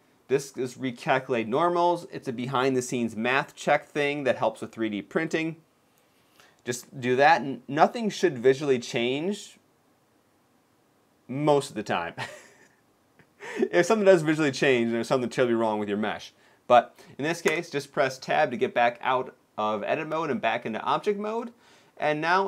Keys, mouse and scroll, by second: 17.4 Tab.